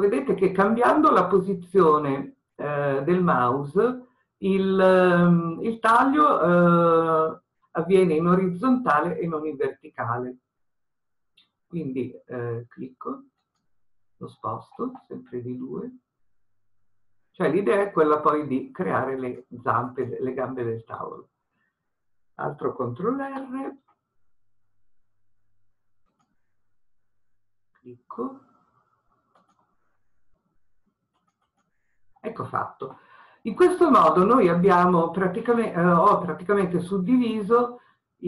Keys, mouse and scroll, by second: 20.0 click, 23.3 ctrl+r, 31.3 click.